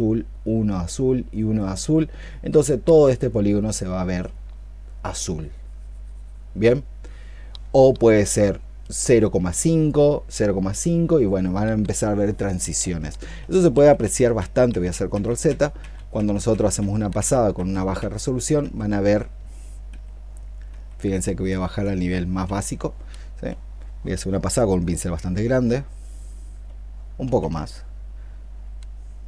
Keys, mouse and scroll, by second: 4.0 double click, 5.4 double click, 13.2 ctrl+z, 13.6 ctrl+z, 13.9 ctrl+z, 14.2 ctrl+z, 14.5 ctrl+z, 14.9 ctrl+z, 15.3 ctrl+z, 15.6 ctrl+z, 16.3 ctrl+z, 16.6 ctrl+z, 17.0 ctrl+z, 17.4 ctrl+z, 17.8 ctrl+z, 18.4 ctrl+z, 18.9 ctrl+z, 19.7 ctrl+z, 20.5 ctrl+z, 22.3 ctrl+z, 23.3-24.3 i, 27.2 ctrl+z.